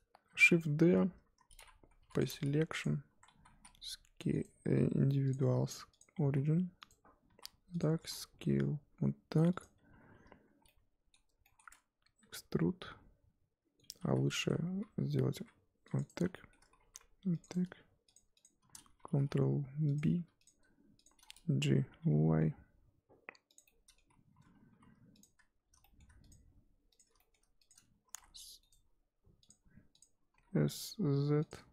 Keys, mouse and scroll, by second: 0.4 shift+d, 2.2 p, 2.4 Tab, 2.8 click, 3.1 Tab, 3.3 a, 3.5 s, 6.0 click, 6.2 s, 7.3 s, 10.7-12.2 middle drag, 12.2 e, 14.0 ctrl+z, 14.3 middle click, 14.9-15.3 scroll up 1, 15.3 ctrl+r, 16.3 shift+middle click, 16.8 ctrl+r, 18.3 alt+shift+click, 19.1 ctrl+b, 20.1 3, 20.4 click, 21.2-21.8 scroll down 1, 21.8 g, 23.7 middle click, 24.1-24.7 scroll up 1, 24.7 2, 25.2 click, 25.8 scroll up 1, 25.8 middle click, 26.2 shift+click, 27.2 middle click, 27.7 shift+click, 28.0 s, 30.0 click, 30.3 s.